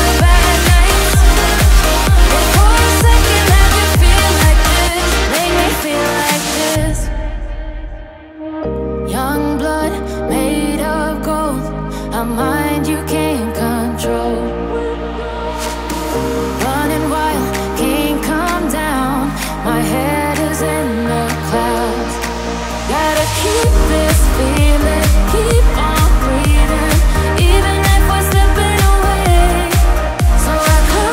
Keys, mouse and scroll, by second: 3.0 ctrl+z, 8.5 ctrl+z, 13.0 ctrl++, 16.2 ctrl+z, 16.6 ctrl+z, 17.0 right click, 17.7 ctrl+z, 18.3 ctrl+z, 19.0 ctrl+z, 19.2 ctrl+z, 21.5 ctrl+z, 22.5 ctrl+z, 22.7 ctrl+z, 22.9 right click, 23.3 ctrl+z, 24.0 ctrl+z, 25.5 ctrl+z, 26.0 ctrl+z, 26.1 right click, 26.3 ctrl+z, 27.3 ctrl+z, 27.5 ctrl+z, 30.7 ctrl+z.